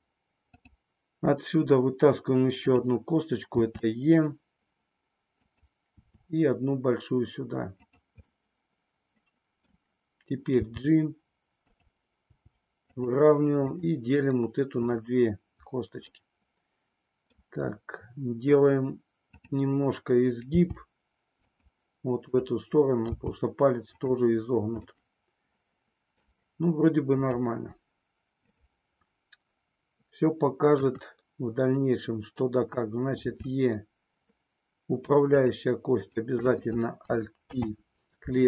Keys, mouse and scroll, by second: 0.4 click, 2.6 click, 3.6 e, 5.6 click, 6.1 e, 8.6-9.8 middle drag, 10.6 g, 12.2 g, 13.0 click, 13.7 click, 16.2-17.6 middle drag, 19.3 click, 20.6 g, 21.7 click, 23.2 g, 24.0 click, 24.8-26.4 middle drag, 27.1 click, 30.7 KP_1, 33.2 e, 36.0 click, 37.4 alt+p.